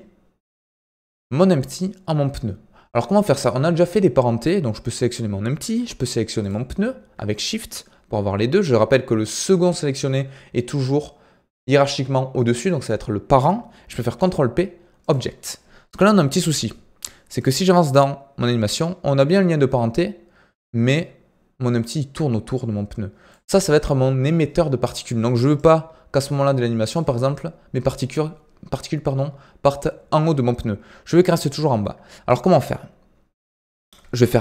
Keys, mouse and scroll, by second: 7.8 shift+click, 14.1 ctrl+p, 17.4-28.5 drag, 31.0-34.4 drag.